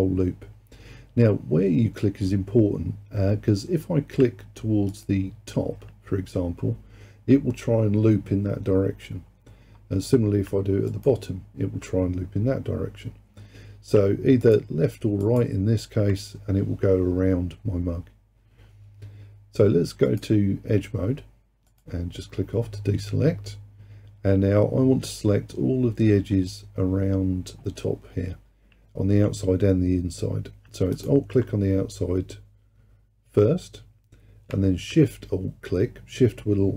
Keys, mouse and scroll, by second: 4.9 alt+click, 10.9 alt+click, 14.5 alt+click, 15.3 alt+click, 20.1-21.9 drag, 31.0 alt+click.